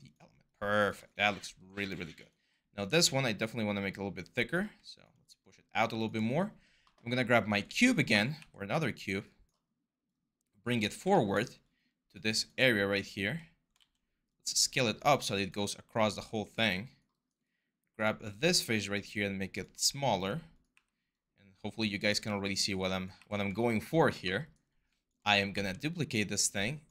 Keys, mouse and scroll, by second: 2.4 r, 8.2 w, 13.0 r, 20.5 w, 21.7 r, 23.0 w, 25.4 ctrl+d.